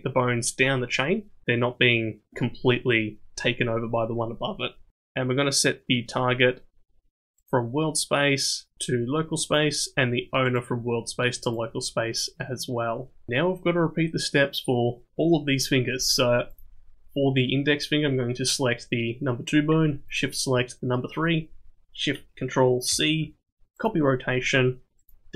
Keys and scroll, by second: 22.9 ctrl+shift+c.